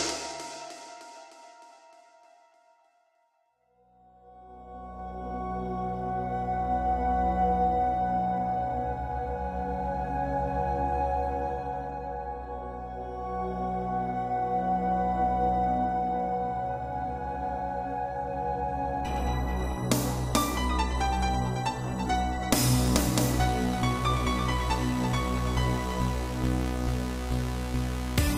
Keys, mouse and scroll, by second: 1.1 click, 1.2 click, 2.5 click, 2.6 click, 3.8 click, 3.9 click, 5.1 1, 7.7 shift+click, 8.7-10.1 typing, 11.8 click, 12.1 scroll down 1, 12.1 middle click, 13.3-13.8 typing, 14.9 click, 15.0 click, 17.5 middle click, 18.7 Left, 19.3 Right, 21.0 Right, 22.0 shift+middle click, 22.3 middle click, 23.7 click, 23.8 click, 25.0 click, 27.1 click, 27.2 click.